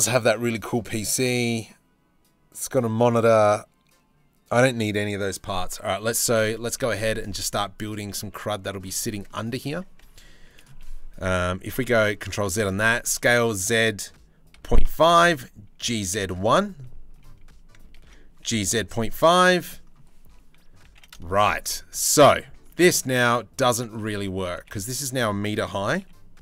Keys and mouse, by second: 6.3 shift+a, 8.8 click, 9.3 Tab, 9.6 s, 10.8 KP_3, 11.1 KP_1, 11.7 ctrl+z, 12.0 Tab, 12.5 s, 15.4 g, 17.6 ctrl+z, 18.0 g, 20.4 g, 22.2 Tab, 23.3 Tab, 23.9 s, 25.1 s.